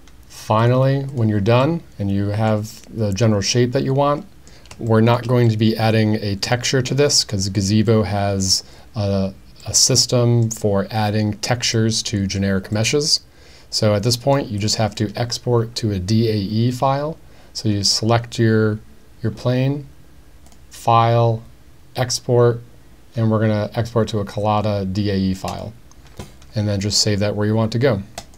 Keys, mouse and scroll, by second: 0.6-1.2 drag, 1.6-2.5 middle drag, 2.7-4.5 middle drag, 4.9 shift+middle drag, 5.5-6.9 middle drag, 7.1-7.4 middle drag, 7.9 middle click, 9.7-10.4 middle drag, 11.8 middle click, 12.7-14.3 middle drag, 14.6 click, 20.6-25.7 drag.